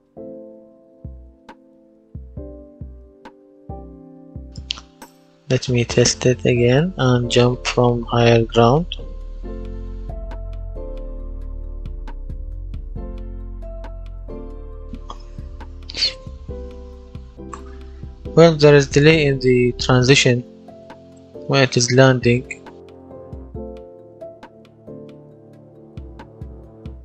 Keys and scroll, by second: 1.9-3.5 typing, 10.8 space, 14.5 Escape.